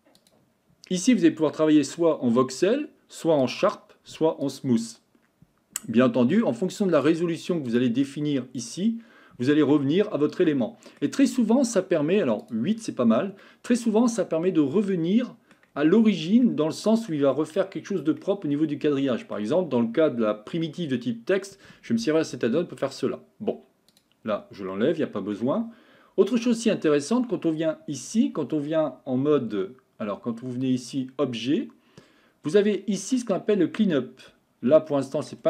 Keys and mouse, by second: 7.0 click, 8.0-9.8 drag, 9.8-11.0 middle drag, 12.4 click, 13.5-15.5 middle drag, 16.4-17.1 middle drag, 18.2-19.4 middle drag, 24.7-25.3 middle drag, 31.0-34.4 drag, 34.9 middle click.